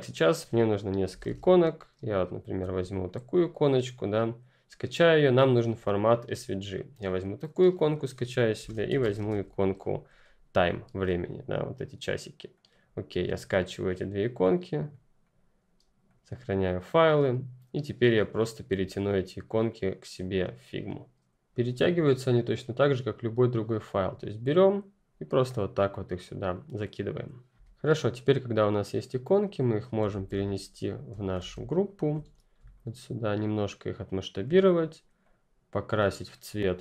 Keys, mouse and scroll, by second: 0.0 click, 0.8-1.7 typing, 3.0 click, 7.7 click, 8.4-10.4 typing, 12.5 click, 18.3 click, 18.7 F11, 19.6 click, 22.6 click, 27.6 F11, 27.8 click, 30.0 ctrl+x, 30.8 scroll up 2, 31.1 ctrl+click, 31.3 ctrl+v, 31.6-32.6 ctrl+scroll up 3, 32.6 shift+click, 32.9 shift+Num_Lock.